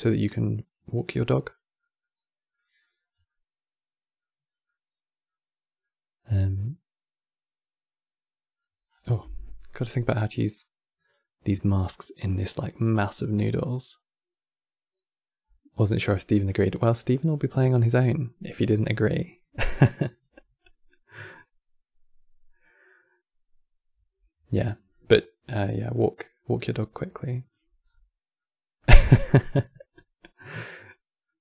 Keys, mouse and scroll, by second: 1.8-2.3 scroll up 1, 2.3 middle click, 2.8 scroll down 3, 3.0-4.2 middle drag, 4.2 scroll down 2, 4.4-8.5 middle drag, 8.7 scroll down 4, 9.1-10.2 middle drag, 10.2-12.0 drag, 12.0-15.1 middle drag, 24.4 middle click, 24.8-25.2 scroll up 7, 25.2 middle click, 25.6 scroll up 5, 26.4 click, 27.5-28.1 scroll down 3, 28.1-31.4 middle drag.